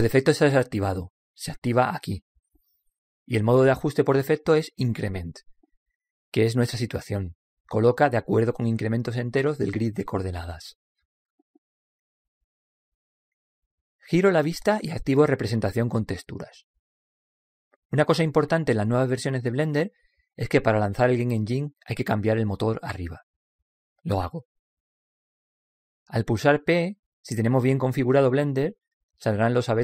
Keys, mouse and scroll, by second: 2.2-6.4 drag, 11.5 middle click, 11.5 scroll up 1, 15.0-16.2 middle drag, 16.2 click, 18.2 middle click, 19.1-20.1 scroll up 1, 20.1-21.0 scroll up 1, 21.0 scroll up 1, 21.6 p, 25.0 click, 27.7 p.